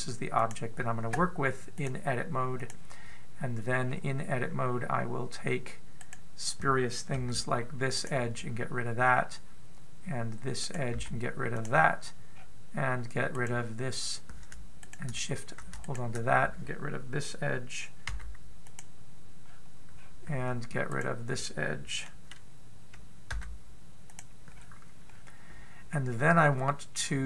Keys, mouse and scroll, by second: 4.6-5.7 scroll up 5, 6.8 right click, 7.9 x, 9.9-10.3 scroll down 2, 11.4 right click, 11.7 x, 12.9 scroll up 1, 13.1-14.1 scroll down 4, 14.1 right click, 15.6 shift+right click, 16.7 right click, 18.9 x, 20.2-20.7 scroll up 2, 20.7-21.7 scroll down 1, 21.7 right click, 21.7-22.0 scroll down 3, 24.1 x, 25.4-25.9 scroll up 3, 25.9-27.2 scroll up 1.